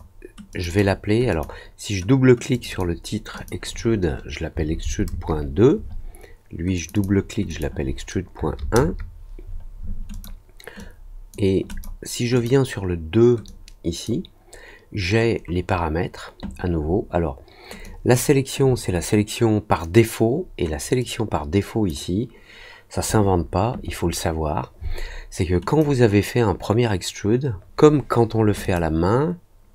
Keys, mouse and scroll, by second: 0.4 click, 0.6 click, 1.2 click, 2.5 click, 2.6 click, 3.3 click, 6.7 click, 6.9 click, 7.4 click, 10.1 click, 10.7-11.3 drag, 11.6 click, 12.3 click, 13.4-14.0 drag, 17.8 click, 20.9-21.8 drag, 25.6 click, 28.6 click.